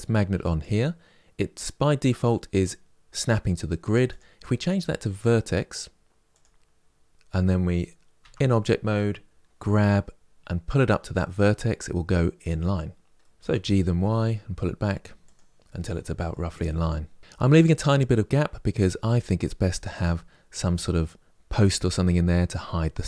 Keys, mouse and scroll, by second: 0.3 click, 7.9 Tab, 9.4 g, 12.9-13.2 middle drag, 13.2 g, 15.4-17.2 middle drag, 17.2-17.9 scroll up 3.